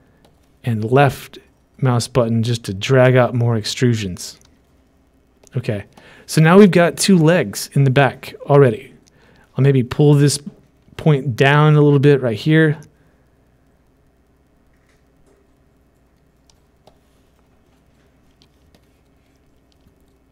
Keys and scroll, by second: 4.5 ctrl+z.